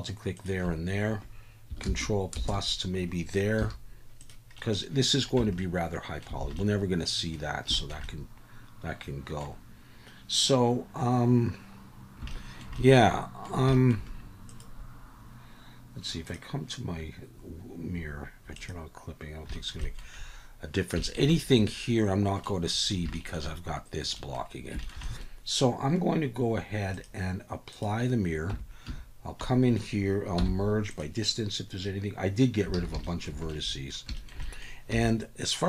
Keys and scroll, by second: 1.8 ctrl+KP_Add, 2.6 ctrl+KP_Add, 3.6 x, 5.4 Tab, 6.4 alt+a, 28.5 Tab, 28.9 a, 30.4 m, 32.7 alt+a, 34.9 3.